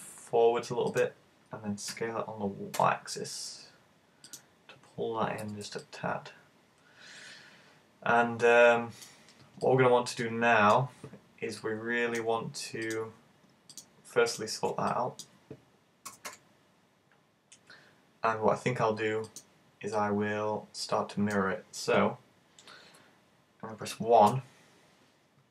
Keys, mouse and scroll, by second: 1.1 click, 2.0 s, 4.4 click, 5.5 z, 5.9 middle click, 9.6 middle click, 11.7 middle click, 12.9 right click, 13.8 shift+right click, 14.3 right click, 14.9 middle click, 16.1 g, 19.4 click, 20.0 middle click, 24.3 KP_1.